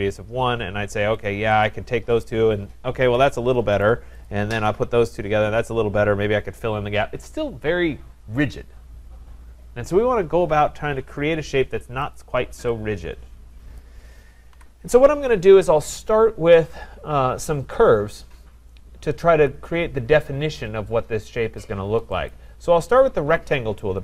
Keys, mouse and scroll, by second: 1.3 click, 3.8 right click, 4.3 click, 4.7 click, 12.1 click, 13.8 click, 14.5 Delete, 22.3 click.